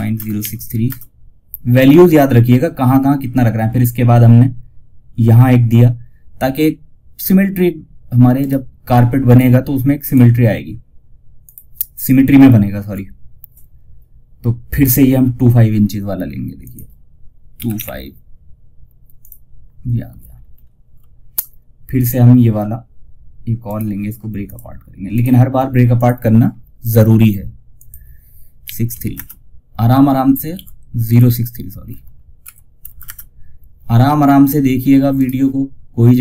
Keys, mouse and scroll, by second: 7.7 right click, 8.6 click, 11.5 ctrl+scroll down 1, 15.9 click, 18.5 click, 19.6 ctrl+scroll down 1, 22.9 right click, 23.7 click, 29.7 ctrl+Num_Lock, 29.7 click, 29.8 ctrl+z, 30.4 click, 31.7 Right, 34.4 right click.